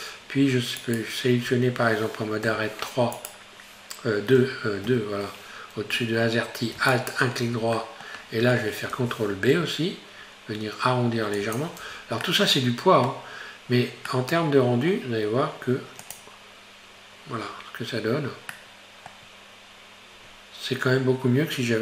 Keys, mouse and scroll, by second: 0.8 alt+right click, 2.5 3, 3.2 right click, 4.4 1, 4.9 2, 6.9 alt+right click, 7.8-9.0 middle drag, 9.0 ctrl+b, 11.9 Tab, 12.3-16.1 middle drag, 16.1 click, 18.6-21.6 middle drag.